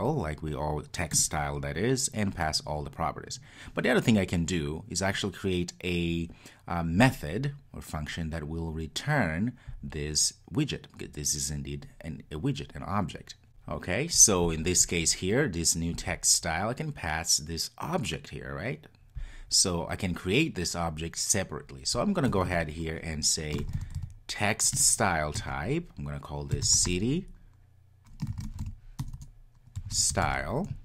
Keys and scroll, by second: 1.2 Return, 24.7 Return.